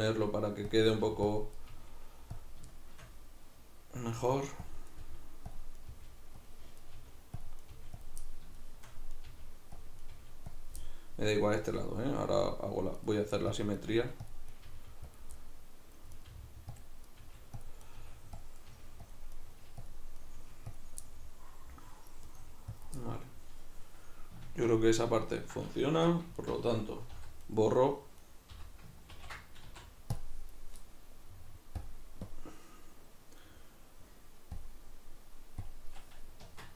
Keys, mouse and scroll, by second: 0.0 right click, 0.1 g, 0.8 click, 1.0 right click, 1.0 g, 1.4 click, 1.6 right click, 1.7 g, 2.4 click, 2.8-4.1 shift+middle drag, 4.1 right click, 4.3 g, 4.8 click, 4.9 right click, 5.0 g, 5.6 click, 5.8 right click, 5.9 g, 6.5 click, 6.8 right click, 7.0 g, 7.5 click, 7.6 right click, 7.8 g, 8.1 click, 8.2 middle click, 9.2 right click, 9.3 g, 9.8 click, 10.0 right click, 10.1 g, 10.6 click, 10.8-13.0 middle drag, 13.0 right click, 13.2 g, 13.6 click, 13.8 right click, 13.9 g, 14.3 click, 14.5 right click, 14.7 g, 15.2 click, 15.4 middle click, 16.2 right click, 16.3-20.3 typing, 16.8 click, 17.1 right click, 17.6 click, 17.8 right click, 18.4 click, 18.6 right click, 19.1 click, 19.3 right click, 19.9 click, 20.2 right click, 20.8 click, 21.0-22.3 middle drag, 22.3 right click, 22.4 g, 22.8 click, 23.0-26.3 middle drag, 25.9 2, 26.3 alt+right click, 27.1 v, 27.6 right click, 28.2 right click, 28.5 l, 29.1 ctrl+i, 29.6 x, 31.8-36.4 drag, 36.4 Tab.